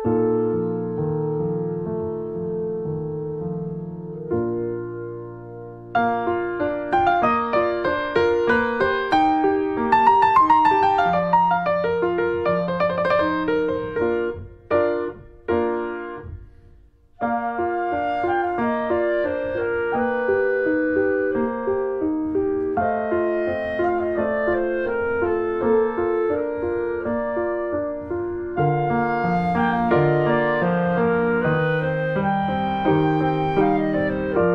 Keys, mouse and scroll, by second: 0.0 click, 0.5 alt+middle click, 1.2 scroll up 1, 1.4 middle click, 2.4 Tab, 2.6 click, 2.8 scroll down 1, 3.0 middle click, 4.2 click, 4.9 Delete, 5.2-5.7 scroll down 2, 5.7 click, 5.9 alt+middle click, 6.1 alt+middle click, 6.5 scroll up 2, 6.9 shift+middle click, 7.9 shift+middle click, 8.3-8.6 scroll up 1, 8.6 shift+click, 8.9 shift+click, 9.2 shift+right click, 10.2 right click, 10.3-11.6 scroll down 3, 10.5 alt+middle click, 11.1 shift+middle click, 11.7 click, 12.0 shift+middle click, 12.3 scroll up 1, 12.9 scroll up 1, 13.2 shift+middle click, 13.6 click, 14.5 alt+middle click, 15.1 middle click, 15.3 scroll up 1, 15.4-16.7 shift+middle drag, 16.7 click, 18.0 shift+middle click, 18.4 r, 19.6 click, 20.1 middle click, 20.9 s, 22.2 middle click, 22.2 click, 22.8 alt+z, 23.0 middle click, 23.4 alt+middle click, 24.4 r, 26.8 middle click, 27.2 click, 27.8 shift+middle click, 28.7 s, 29.3 middle click, 29.8 click, 30.4 alt+middle click, 30.6 alt+middle click, 31.1 r, 32.7 click, 33.2 click, 33.8 middle click, 34.3 click.